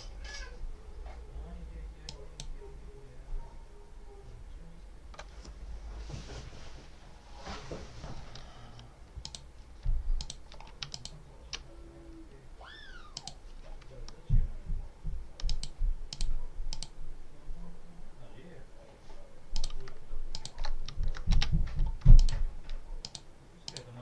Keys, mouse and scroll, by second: 2.0 click, 9.1 click, 10.1 shift+click, 10.8 ctrl+shift+click, 13.0 click, 15.4 click, 16.0 click, 16.6 click, 19.4 click, 20.2 shift+click, 22.0 shift+click, 22.9 shift+click, 23.6 click.